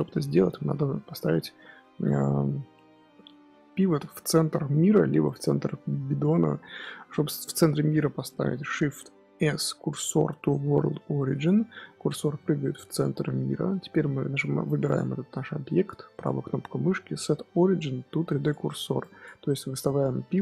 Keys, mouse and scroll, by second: 0.4 scroll down 1, 0.5-2.4 middle drag, 2.4-2.8 scroll down 1, 2.8-3.8 scroll up 4, 3.8-6.2 scroll down 4, 7.6-9.3 middle drag, 9.3 shift+s, 11.7-12.2 middle drag, 12.2 scroll up 1, 12.3-14.8 middle drag, 14.8 click, 16.0-20.4 right drag.